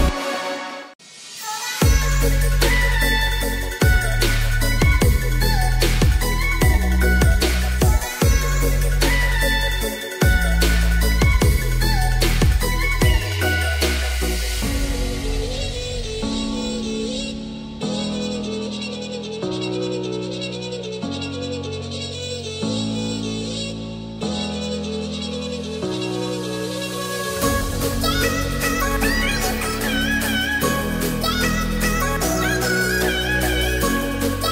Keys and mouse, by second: 1.4 click, 2.4 middle click, 4.3 s, 6.6 g, 7.6 y, 11.0 ctrl+a, 12.1 Tab, 12.5 middle click, 14.7 shift+middle click, 15.3 middle click, 16.3 g, 16.8 y, 20.6 click, 21.4-22.4 middle drag, 23.9 shift+middle click, 25.8 shift+middle click, 27.3 Tab, 28.1 Tab, 29.3 ctrl+r.